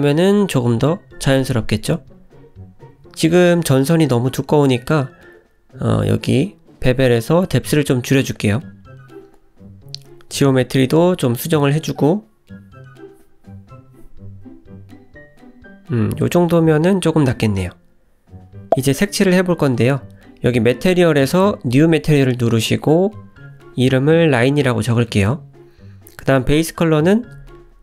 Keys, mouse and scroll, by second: 0.6 scroll up 1, 0.8 click, 1.3-1.7 scroll down 4, 2.5 click, 4.2 scroll up 3, 6.0-6.5 scroll down 4, 7.3 click, 8.5 ctrl+z, 10.2 click, 11.2 ctrl+z, 11.4 click, 15.8-16.4 scroll down 2, 17.1 click, 19.2 click, 25.5 click, 27.3 click, 27.5-27.8 scroll up 3.